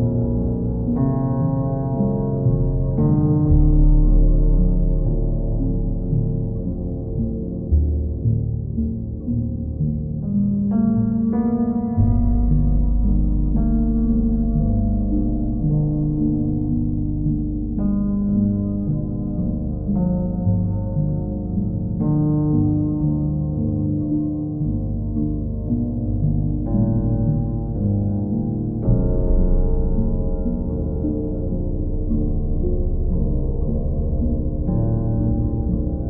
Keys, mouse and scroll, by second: 1.9 alt+click, 4.1 ctrl+click, 4.6 ctrl+click, 7.9 click, 11.3 click, 11.5 ctrl+z, 12.4 ctrl+click, 13.4 ctrl+click, 14.1 ctrl+click, 17.1 click, 19.7 click, 21.9 ctrl+click, 23.0 ctrl+click, 23.9 ctrl+click, 28.3 click, 28.5 ctrl+z, 29.2 ctrl+click, 30.3 ctrl+click, 30.7 ctrl+click, 33.5 click, 34.8 ctrl+click.